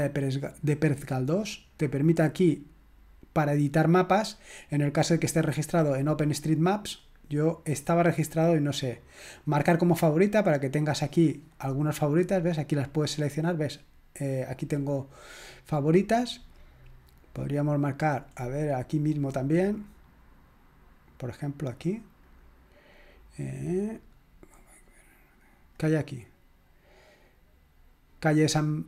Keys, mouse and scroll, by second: 1.2 click, 5.6-6.4 drag, 9.6 click, 11.4 click, 12.3 click, 14.5 click, 16.8 click, 17.4 click, 17.8 click, 21.6 click, 25.7 middle click, 26.2 middle click.